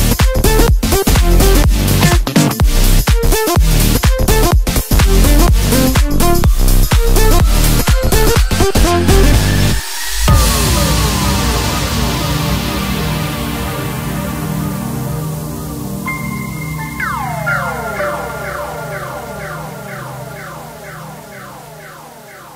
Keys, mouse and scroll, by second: 1.2-2.3 scroll down 1, 3.3-6.5 drag, 12.8-13.8 scroll down 3, 13.8-16.0 right drag, 16.0-17.2 scroll up 5, 18.0 s, 21.4 s.